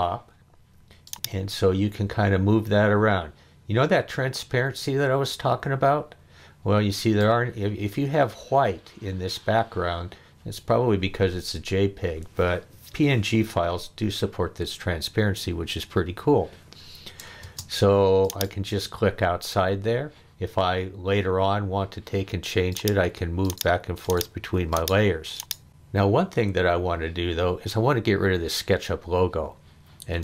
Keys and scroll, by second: 17.4 space.